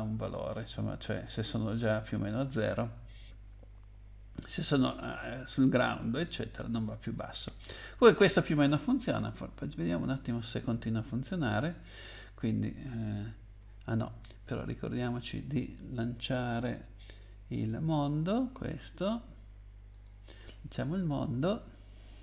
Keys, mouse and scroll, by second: 5.1 click, 5.3 click, 6.4 click, 7.6 scroll down 2, 10.0 click, 15.3 click, 18.2 click, 19.9 click.